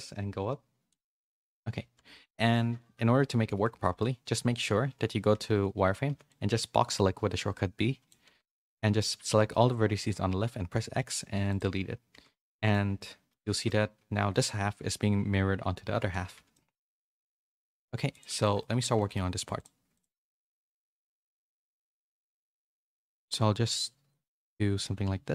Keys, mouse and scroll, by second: 2.6 KP_1, 3.8 shift+middle click, 4.6 z, 5.3 a, 5.5 a, 6.0 b, 12.1 z, 12.4 middle click, 13.0 middle click, 13.5 middle click, 15.9 Tab, 16.2 a, 16.3 a, 16.5 middle click, 17.3 shift+middle click, 18.4 shift+middle click, 18.7 Tab, 18.9 middle click, 18.9 3, 19.3 3, 19.5 click, 20.7 KP_3, 21.5 KP_1, 22.1 z, 22.9 e.